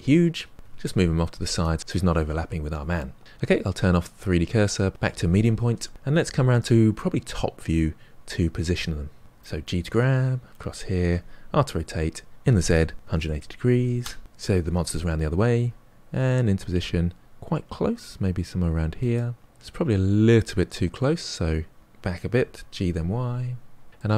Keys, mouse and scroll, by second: 0.5 g, 3.6-5.2 drag, 5.9-7.2 middle drag, 7.2 KP_7, 9.3 g, 11.0 r, 14.6 g, 18.6-19.8 middle drag, 19.8 scroll up 3, 21.1 g, 23.9-24.1 middle drag.